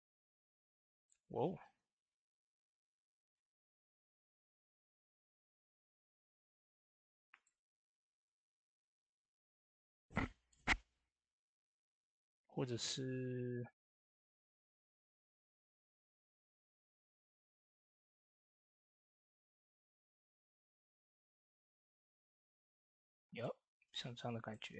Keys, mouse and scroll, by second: 9.6 typing, 17.8-21.9 drag, 22.3 scroll up 1, 22.6 middle click, 22.9 shift+middle click, 23.5 typing, 23.6 middle click, 23.9 scroll up 1.